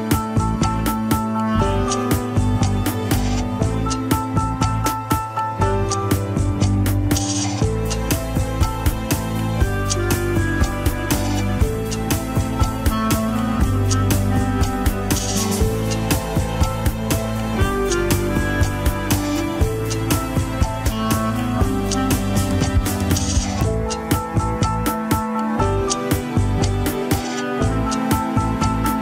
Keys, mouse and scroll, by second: 1.1 shift+click, 1.6 ctrl+Tab, 2.3 alt+z, 2.6 alt+z, 3.3 ctrl+click, 4.2 click, 4.8 Tab, 5.3 click, 5.8 l, 6.6 click, 7.2 Tab, 8.5 ctrl+click, 9.2 click, 9.6 Tab, 10.9 ctrl+i, 11.9 click, 12.3 l, 13.1 click, 13.6 Tab, 14.7 shift+click, 15.5 shift+w, 17.4 ctrl+click, 17.9 g, 20.0 ctrl+click, 20.2 g, 21.1 ctrl+Tab, 21.7 click, 22.1-23.0 middle drag, 23.0 ctrl+Tab, 23.7-24.3 drag, 25.1 alt+z, 25.4 KP_3, 26.3 shift+z, 27.1 alt+z, 28.2 g.